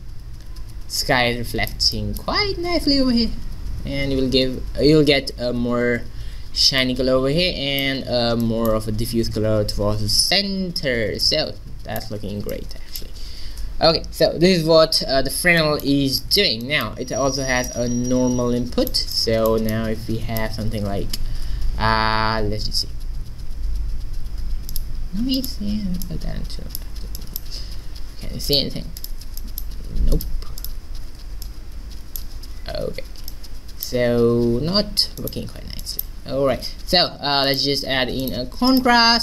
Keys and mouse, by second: 6.8-10.3 middle drag, 11.3 middle click, 15.4 middle click, 20.8 shift+a, 26.1-27.8 drag, 28.6 click, 29.4-32.6 drag, 33.4 click, 33.7 click, 36.5 shift+a, 38.9-39.2 drag.